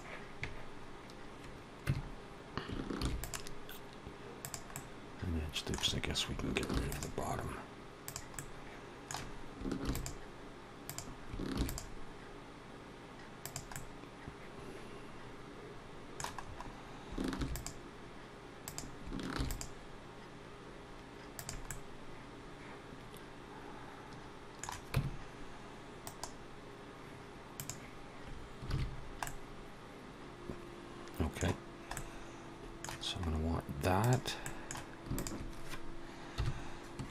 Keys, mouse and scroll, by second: 2.0 Tab, 2.7 ctrl+r, 4.5 middle click, 6.6 ctrl+r, 8.2 middle click, 10.4 ctrl+r, 11.4 ctrl+r, 13.5 middle click, 16.3-16.7 scroll up 2, 17.2 ctrl+r, 19.2 ctrl+r, 21.5 middle click, 24.8 Tab, 25.9 right click, 28.5 alt+a, 28.8 scroll down 2, 29.1 middle click, 31.8 middle click, 33.8 click, 34.3 middle click, 35.0 shift+click, 36.2 KP_1.